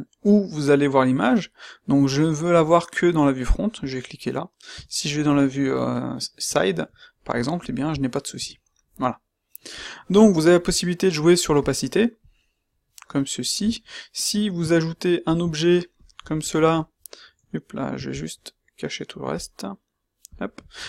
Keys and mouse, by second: 4.7 q, 6.4 q, 8.3 q.